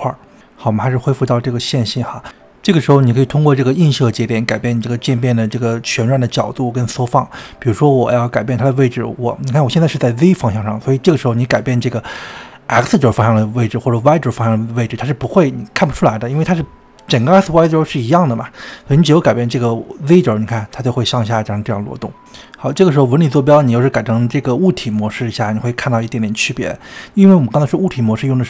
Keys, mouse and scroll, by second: 1.2 middle click, 1.8-2.4 drag, 2.4 middle click, 2.7 scroll up 1, 2.9-3.4 middle drag, 3.4 click, 3.8-5.6 middle drag, 7.7-11.2 drag, 11.7-13.6 middle drag, 13.6-15.8 drag, 17.9-20.9 drag, 22.3-26.9 middle drag, 27.3 drag.